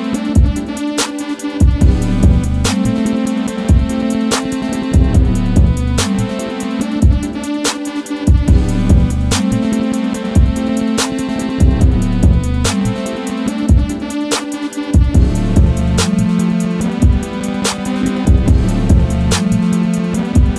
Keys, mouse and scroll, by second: 0.2 click, 1.0 F4, 2.2 click, 2.8 F4, 3.4-8.6 drag, 11.7 right click, 13.4 click, 15.4 click, 16.2 right click, 17.3 click, 19.9 z.